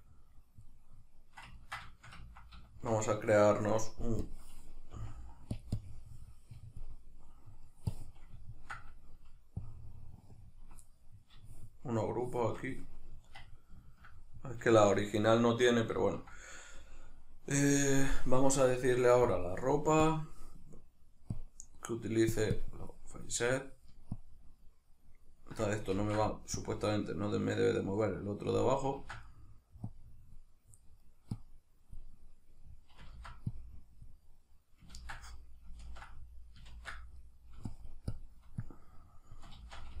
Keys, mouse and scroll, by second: 0.1-4.3 middle drag, 4.3-5.7 drag, 4.9 f, 7.0 middle click, 7.9 click, 8.4-9.6 ctrl+middle drag, 9.6-10.8 ctrl+drag, 10.8-19.3 middle drag, 19.3-29.3 drag, 25.9 ctrl+z, 29.0 ctrl+z, 29.3 middle click, 29.9 click, 30.8 middle click, 31.4-32.6 drag, 32.6 middle click, 33.1 ctrl+z, 33.5-35.2 drag, 35.0 ctrl+z, 35.2-37.7 middle drag, 35.9 ctrl+z, 36.7 ctrl+z, 37.7-40.0 shift+drag, 39.6 ctrl+z.